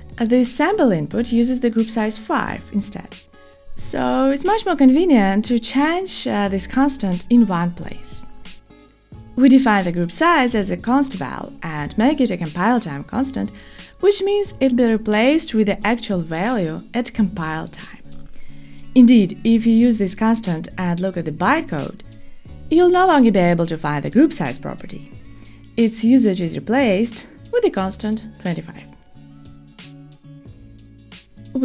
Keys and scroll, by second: 17.1 Tab, 19.5 Return.